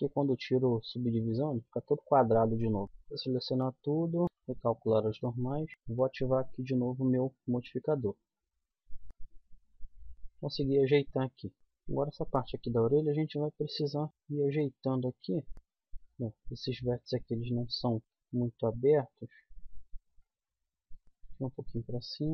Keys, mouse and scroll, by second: 2.8 a, 3.2 w, 4.2 ctrl+n, 6.3 click, 8.2 middle click, 8.8 middle click, 9.0 a, 10.1-11.5 middle drag, 11.5-13.8 drag, 11.5 right click, 12.7 g, 14.1 g, 15.2 click, 17.1 middle click, 18.4 middle click, 20.6 middle click.